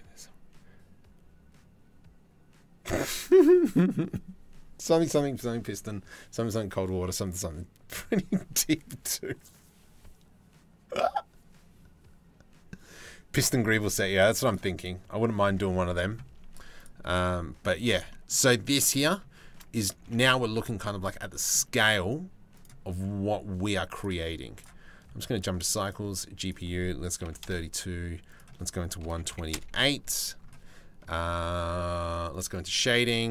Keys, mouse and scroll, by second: 16.7 middle click, 18.0 middle click, 18.3 click, 19.8 ctrl+s, 22.2 click, 23.6 click, 25.0 click, 26.0-27.1 drag, 27.9-29.2 drag.